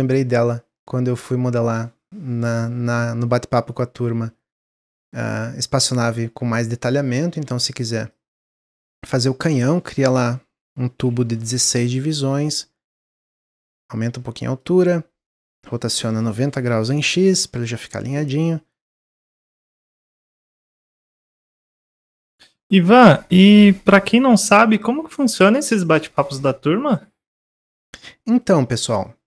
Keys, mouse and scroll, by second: 7.3 scroll down 1, 8.0 click, 8.8 middle click, 9.5-12.0 drag, 12.0-13.5 middle drag, 13.5-17.8 drag, 17.8-18.5 middle drag, 18.5 click, 19.6 middle click, 20.1 s, 21.1-22.5 middle drag, 22.5 click, 24.8 click, 25.4-26.2 middle drag, 26.2-26.9 scroll up 1, 26.9 click, 28.0-28.9 middle drag, 28.9 click.